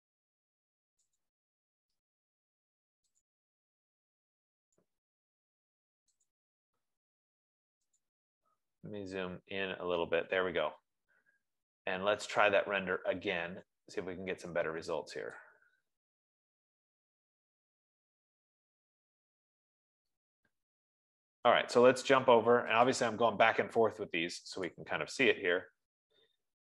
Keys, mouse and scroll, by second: 0.0 click, 1.7 click, 2.7 middle click, 3.6 click, 4.6 middle click, 6.7 click, 8.5 click, 8.8-9.6 scroll, 9.6 scroll, 10.7 F15, 15.9 click, 23.4 click, 25.4 click.